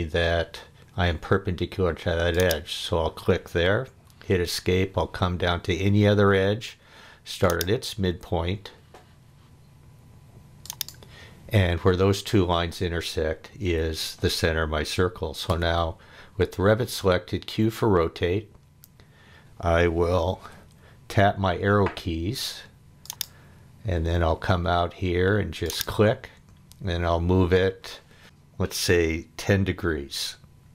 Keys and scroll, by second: 3.9 Escape, 13.8 Escape, 15.5 q, 20.3 Down.